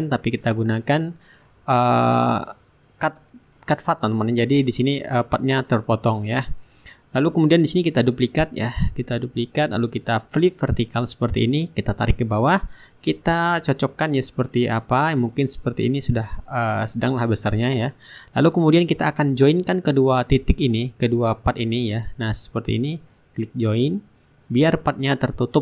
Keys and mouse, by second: 0.2-4.0 drag, 3.7 Delete, 4.2-9.6 drag, 5.9-9.6 right drag, 10.1-14.7 drag, 15.2 shift+click, 17.3-19.8 drag, 20.2-22.7 drag, 23.7-25.6 drag.